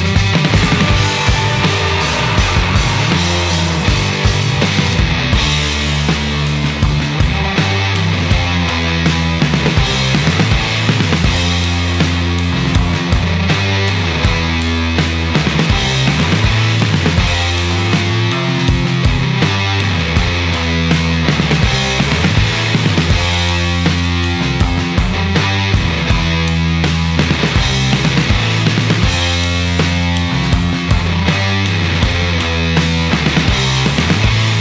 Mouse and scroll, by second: 3.0 click, 4.0 click, 9.8 click, 10.9 click, 12.2-13.4 drag, 14.2 right click, 15.3 click, 16.4 right click, 17.6-18.6 drag, 19.2 click, 20.8 click, 21.9 click, 22.3 right click, 23.1 click, 23.7 click, 25.1 click, 25.8 click, 26.3 click, 27.4 click, 28.0 click, 29.3 click, 30.0 right click, 32.4 click, 32.9-34.0 drag.